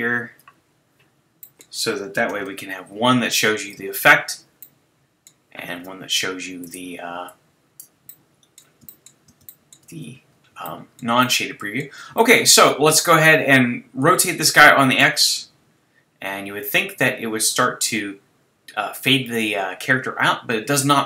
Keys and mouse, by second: 2.4 shift+z, 6.2 middle click, 6.6-7.0 drag, 8.1-12.0 drag, 15.0 click, 15.7-16.9 drag.